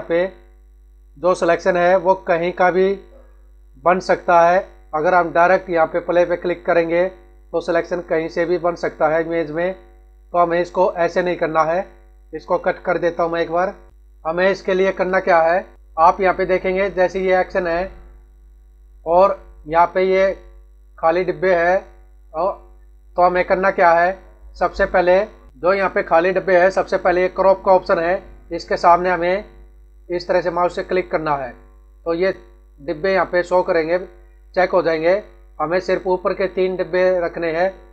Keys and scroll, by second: 14.1 ctrl+=.